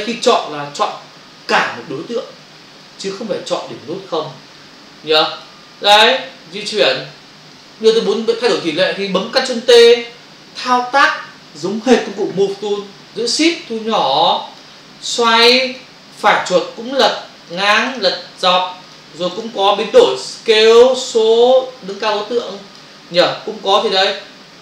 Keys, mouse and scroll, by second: 0.7 click, 0.9 click, 5.4 click, 5.9 click, 7.5 click, 13.6 shift+click, 15.1 click, 16.2 right click, 17.8 right click, 18.0 right click, 19.4 right click, 19.5 right click, 20.5 click, 20.6 click, 22.0 click, 23.2 right click.